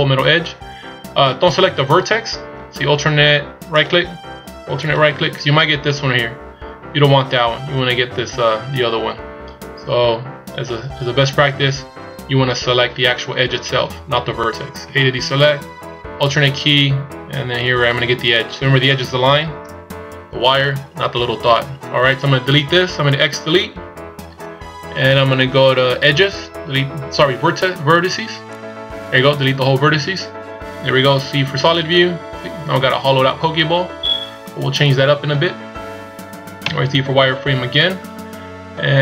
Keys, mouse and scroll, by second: 1.6 right click, 3.8 alt+right click, 4.9 alt+right click, 14.9 a, 18.9 alt+right click, 23.7 x, 31.1 z, 31.7 middle click, 35.2 KP_1, 36.6 z.